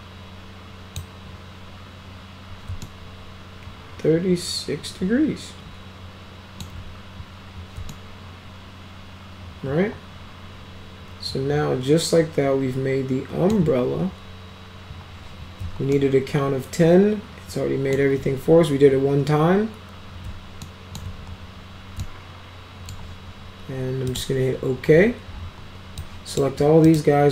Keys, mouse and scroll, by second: 2.8-6.6 alt+middle drag, 7.9-13.5 alt+middle drag, 15.9-18.0 alt+middle drag, 20.7 alt+middle click, 22.0 alt+middle click, 24.1 click, 26.0 click, 26.9 right click.